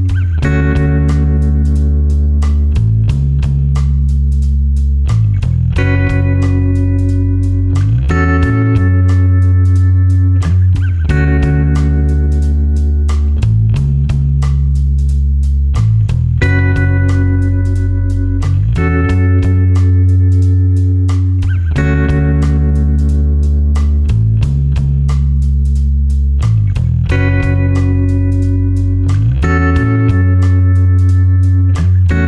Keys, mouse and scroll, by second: 8.1 click, 8.4-9.1 scroll down 1, 9.3-9.8 scroll up 1, 9.8-10.7 scroll down 1, 10.7-14.2 scroll up 1, 18.8 click, 20.9 click, 29.6 click.